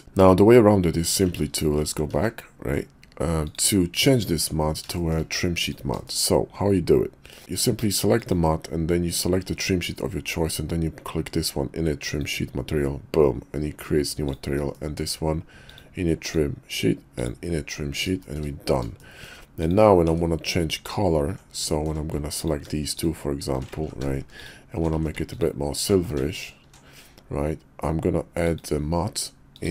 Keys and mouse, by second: 1.4 ctrl+z, 1.7 ctrl+z, 2.2 ctrl+z, 3.4 click, 4.4 Tab, 4.9 shift+middle click, 5.6 click, 6.0 shift+click, 8.1 click, 12.0 click, 14.2 click, 14.7 shift+middle click, 15.6 click, 16.2 click, 17.1 click, 18.2 shift+middle click, 19.0 shift+middle click, 19.6 click, 20.0 Tab, 21.7 shift+click, 22.4 alt+click, 22.9 alt+shift+click, 23.8 ctrl+z, 24.3 alt+shift+click, 25.0 ctrl+z, 25.3 alt+shift+click, 26.0 ctrl+z, 26.3 alt+shift+click, 28.4 click, 29.5-29.7 drag.